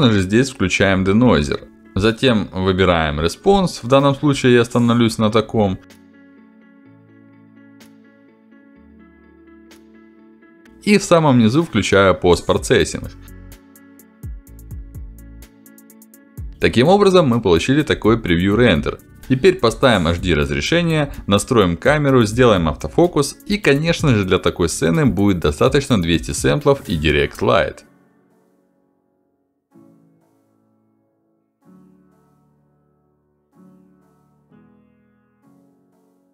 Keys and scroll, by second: 3.6 Down, 4.1 Up, 4.2 Down, 5.1 Down, 5.8 Up, 5.9 Down, 10.7 ctrl+alt+d, 23.6-25.1 typing, 24.3 Return, 25.3 Return, 27.0 shift+f, 30.8 q, 33.6 Return.